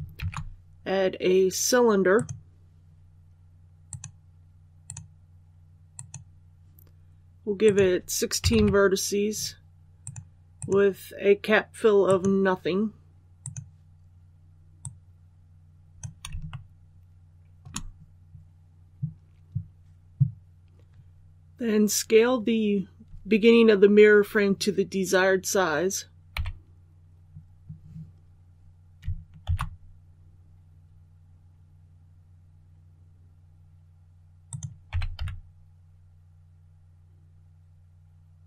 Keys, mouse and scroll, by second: 0.1 shift+a, 2.1-6.9 drag, 8.4 KP_1, 9.9-15.9 drag, 16.4 shift+middle click, 26.3 s, 29.4 shift+z, 34.4 click, 34.8 typing.